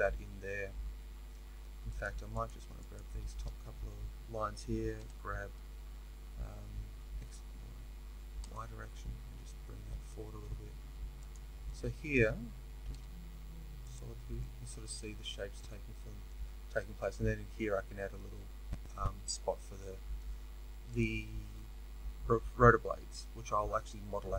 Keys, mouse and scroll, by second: 2.0 click, 2.4 shift+click, 5.0 g, 11.6-20.9 middle drag, 13.9 z, 20.9 click.